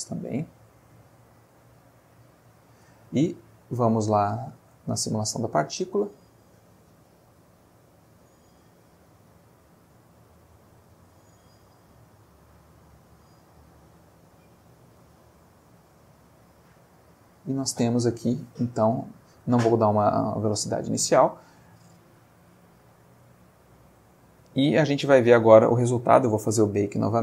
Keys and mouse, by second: 0.5 click, 4.8 click, 6.8-7.8 middle drag, 8.1 middle click, 10.0-11.4 middle drag, 11.9 click, 14.1 click, 14.9-16.3 middle drag, 17.4 middle click, 18.1 middle click, 19.0 middle click, 20.6 middle click, 23.7 ctrl+s.